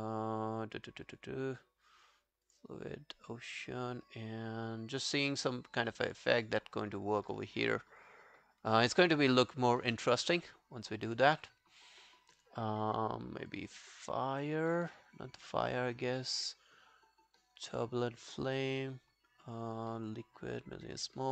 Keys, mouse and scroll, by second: 14.0 double click.